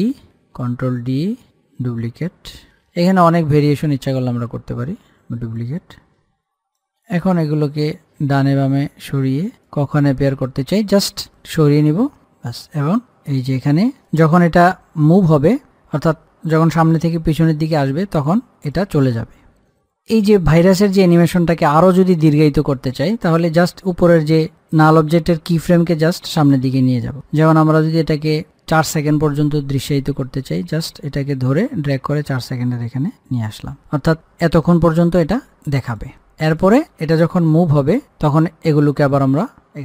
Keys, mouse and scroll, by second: 0.8 d, 1.8-3.0 drag, 3.0 ctrl+d, 4.0-16.6 drag, 16.8-20.3 drag, 28.8-34.8 drag, 35.7 click, 39.2 click.